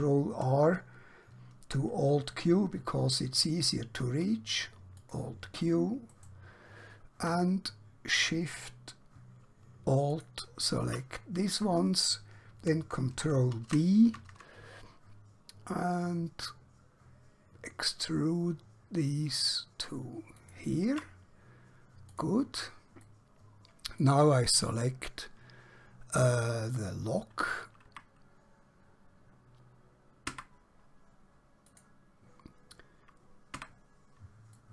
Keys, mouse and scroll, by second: 3.7 alt+Num_Lock, 5.0 click, 6.1 right click, 10.1 alt+shift+click, 13.3 ctrl+b, 22.1 click, 23.1 middle click, 26.7 click, 27.9 Tab, 30.3 Tab, 31.7 click, 33.5 Tab, 34.5 middle click.